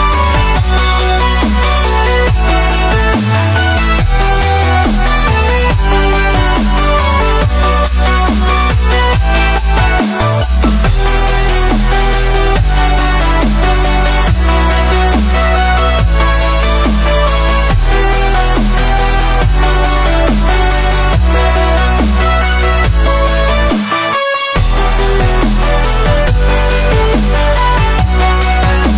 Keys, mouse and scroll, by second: 0.3-1.0 scroll down 1, 1.0 click, 1.4 KP_7, 2.2 click, 2.6 r, 5.3-6.0 drag, 6.0 ctrl+z, 6.4 drag, 6.6 middle click, 7.3 drag, 7.5-8.7 middle drag, 8.7-11.1 drag, 11.7-15.3 drag, 15.3 middle click, 15.9 r, 17.4 middle click, 18.0-25.2 drag, 25.2-27.4 drag, 27.4-27.7 scroll up 1, 27.7-28.1 middle drag, 28.1 scroll down 2, 28.2 middle drag, 28.5-28.9 scroll up 3.